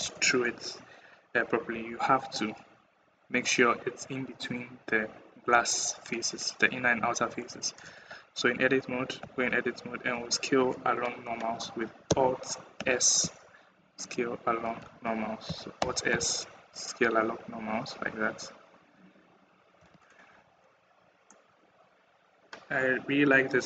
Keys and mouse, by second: 7.8 Tab, 9.0 a, 9.9 s, 15.6 alt+s, 21.1 click, 21.3 middle click, 21.3 click, 21.6-23.3 middle drag.